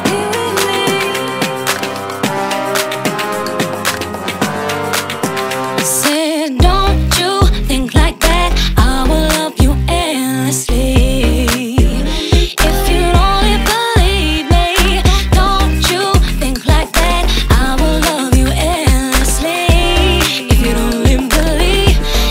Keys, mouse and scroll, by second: 0.0-2.7 drag, 3.4-4.0 middle drag, 4.0-4.5 drag, 4.5 ctrl+a, 6.1 f, 10.7 x, 11.1-12.6 middle drag, 12.6 click, 13.4 middle click, 14.0 ctrl+a, 19.0 ctrl+a.